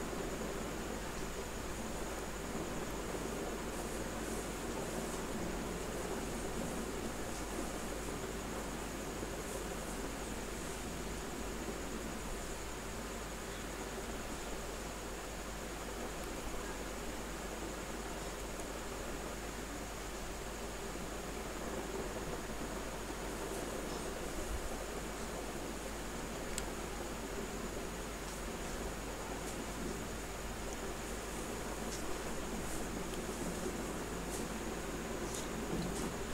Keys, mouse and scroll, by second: 5.6 click, 5.7 space, 7.4-11.6 drag, 11.6 space, 11.8 click, 13.9 space, 14.3 click, 14.4 space, 15.6 click, 18.3 space, 18.5 click, 18.8 space, 19.8-23.2 drag, 23.2 space, 23.3 click, 23.7 space, 23.8 click, 23.9 space, 24.1 click, 24.2 space, 25.5-27.6 drag, 27.6 space, 27.7 click, 28.7 space, 28.9 click, 29.2 space, 29.7 click, 30.3 space, 30.6 click, 30.8 space, 31.3 click, 31.4 space.